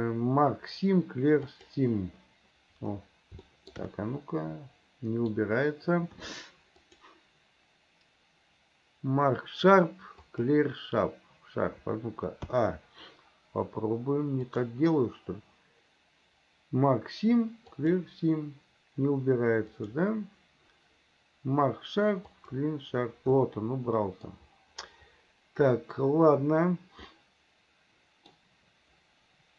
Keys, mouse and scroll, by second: 3.5 shift+middle click, 4.0-5.4 middle drag, 6.8-10.5 drag, 12.6 a, 14.5-18.0 drag, 19.8-22.6 drag, 23.4 middle click, 27.1-28.4 middle drag.